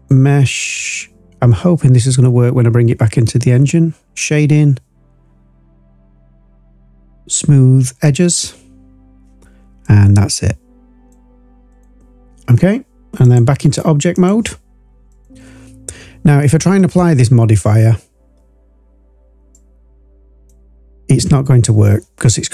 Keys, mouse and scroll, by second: 9.8-11.1 drag, 11.6 click, 13.2-14.5 drag, 15.0 click, 15.6 click.